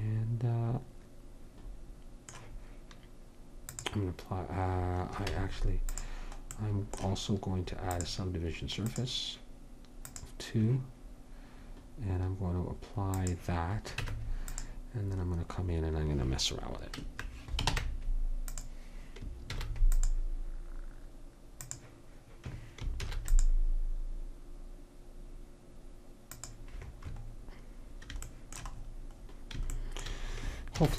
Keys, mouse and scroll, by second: 3.7-5.3 drag, 5.3 Tab, 8.0-9.9 drag, 10.2-12.1 drag, 13.3 click, 14.1 Tab, 17.8 ctrl+Tab, 19.6 ctrl+r, 23.1 ctrl+r, 30.8 ctrl+r.